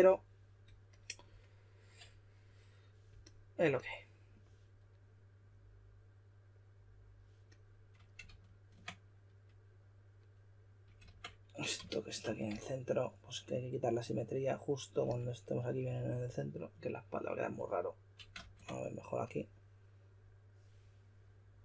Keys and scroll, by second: 8.2 super+z, 11.1 super+z, 18.3 super+z.